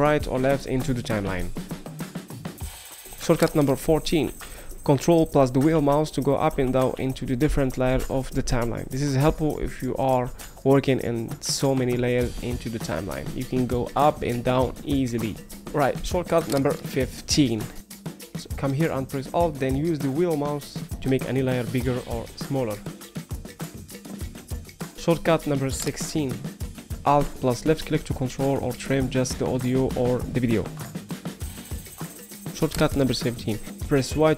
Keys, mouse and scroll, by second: 0.2 middle click, 0.2-0.6 scroll, 1.0 middle click, 1.6 middle click, 2.4 middle click, 5.4 ctrl+middle click, 5.4 ctrl+scroll, 6.2 ctrl+middle click, 6.2 ctrl+scroll, 6.9 ctrl+middle click, 6.9 ctrl+scroll, 7.7 ctrl+middle click, 7.7 ctrl+scroll, 8.2 middle click, 8.2 ctrl+scroll, 8.9 ctrl+middle click, 8.9-9.2 ctrl+scroll, 9.7 ctrl+middle click, 9.7-10.2 ctrl+scroll, 19.2 alt+middle click, 19.2-20.0 alt+scroll, 19.9 alt+middle click, 20.6 alt+middle click, 21.2 alt+middle click, 21.4 alt+scroll, 22.0 alt+middle click, 22.0 alt+scroll, 22.6 alt+middle click, 22.6-23.0 alt+scroll, 23.4 alt+middle click, 23.4 alt+scroll, 27.2 alt+click, 28.4 alt+click, 29.3 alt+click, 32.0 alt+click, 34.0 y.